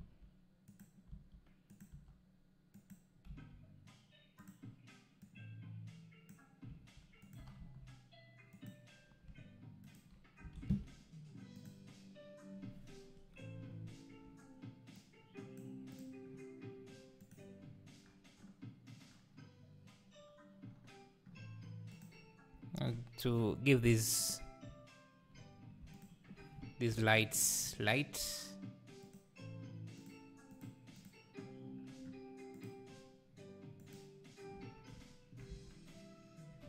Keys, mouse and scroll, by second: 1.1 s, 2.7 g, 3.3 g, 5.3 click, 6.7 s, 7.4 g, 9.9 shift+right click, 10.6 shift+a, 15.0 click, 16.0 click, 22.2 click, 22.6 Tab, 23.4-23.8 scroll up 2, 23.8 3, 24.2 click, 26.1 shift+click, 26.9 ctrl+l, 29.2-30.1 drag, 32.7-34.6 drag, 34.6 Tab, 35.6 Tab.